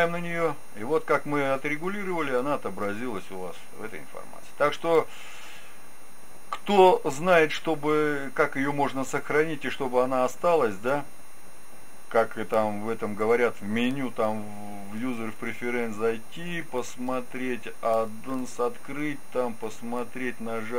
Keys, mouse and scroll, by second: 3.9-5.7 drag, 13.1 ctrl+q, 13.1-15.0 drag.